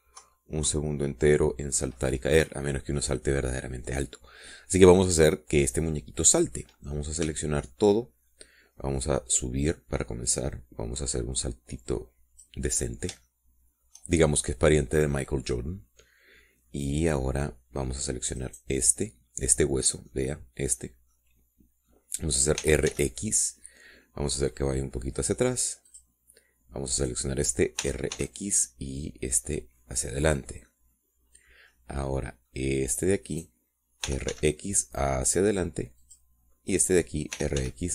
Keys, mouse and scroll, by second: 0.6 Left, 3.3-8.4 middle drag, 8.6 a, 10.3-13.9 drag, 14.0-15.4 middle drag, 15.9 scroll down 2, 17.3-17.8 scroll up 2, 18.3 scroll down 2, 19.7 right click, 21.0 middle click, 22.4 middle click, 23.9 r, 24.2 x, 27.2 middle click, 28.3 scroll up 1, 29.1 r, 29.4 x, 31.6 click, 32.0 middle click, 32.4 click, 33.0 middle click, 34.7 click, 35.4 r, 35.6 x, 37.4 click.